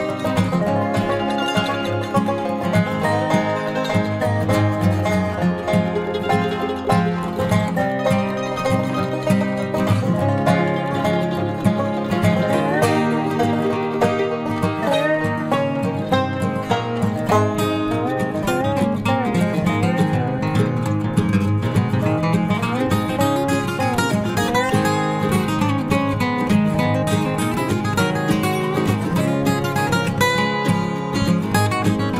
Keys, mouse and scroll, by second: 0.9 Tab, 2.4 click, 3.2 c, 6.8 e, 7.5 z, 9.7 s, 11.9 s, 15.2 Tab, 15.4 z, 17.3 Tab, 19.7 click, 20.8 right click, 21.7 ctrl+r, 25.7 ctrl+Tab, 27.0-29.1 right drag, 28.1 c, 29.1 click, 30.4 x.